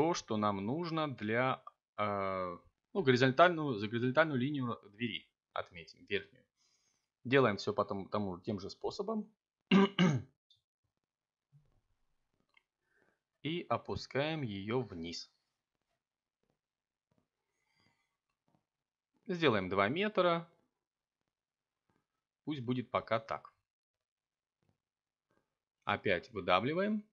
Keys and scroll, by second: 2.0 Return, 3.5 s, 3.9 z, 4.5 0, 5.7 Return, 6.8 1, 8.5 3, 18.5 a, 24.2 r, 26.7 e.